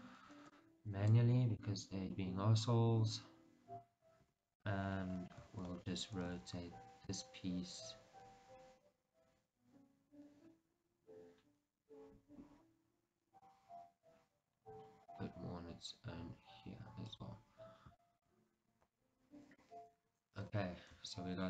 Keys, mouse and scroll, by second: 0.6 b, 3.2 KP_1, 4.4-17.3 middle drag, 4.4 KP_3, 5.2-6.4 scroll down 2, 6.4 r, 17.7-18.2 scroll down 2, 18.2-21.1 shift+middle drag, 21.1 Tab.